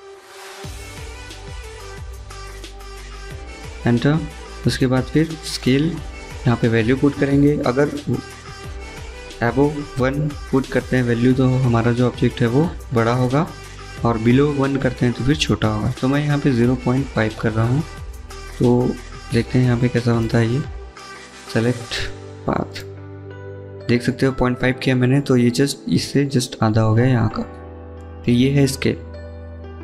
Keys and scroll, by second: 15.4 typing, 16.6-17.9 typing, 19.3 Return, 22.9-23.6 typing.